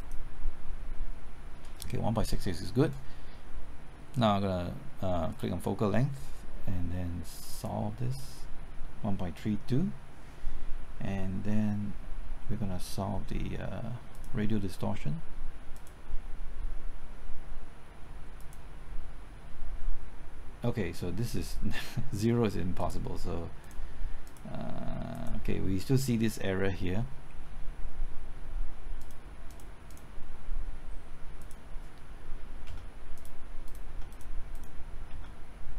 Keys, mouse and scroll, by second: 18.6 click, 32.6 KP_0, 33.1 click, 33.9 KP_0, 34.1 click, 35.1 KP_0.